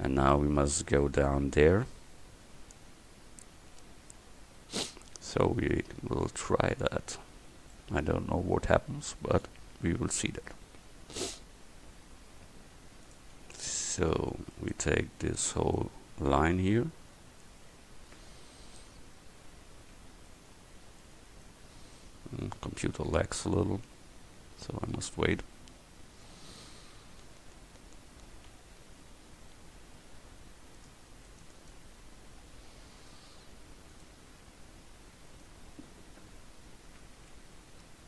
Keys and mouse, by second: 5.3 Tab, 8.8-11.9 middle drag, 13.1-15.0 drag.